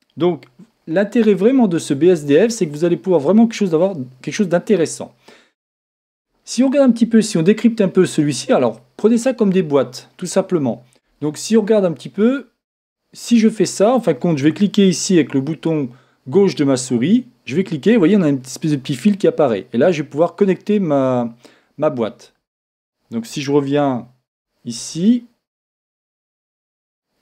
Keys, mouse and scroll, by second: 12.4-14.1 drag, 16.9-18.6 drag, 25.0 shift+z, 26.9-27.2 drag.